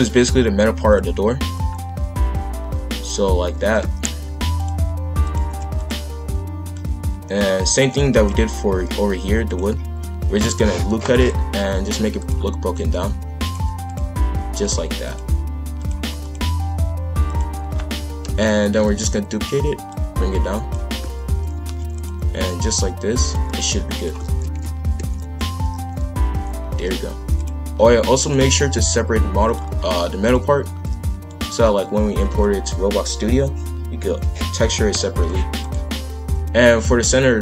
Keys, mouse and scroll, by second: 1.5 click, 3.6 shift+f, 5.2 click, 5.4 shift+f, 6.7 click, 8.0 shift+f, 9.8 ctrl+r, 12.1 click, 13.0 g, 13.9 click, 14.2 g, 15.0 click, 15.4 g, 16.2 click, 16.6 g, 18.2 ctrl+l, 18.8 shift+d, 19.9 click, 20.9 shift+f, 23.2-24.3 drag, 24.3 shift+f, 28.1-31.4 drag, 32.2 ctrl+l, 34.9 p, 37.0-37.4 drag.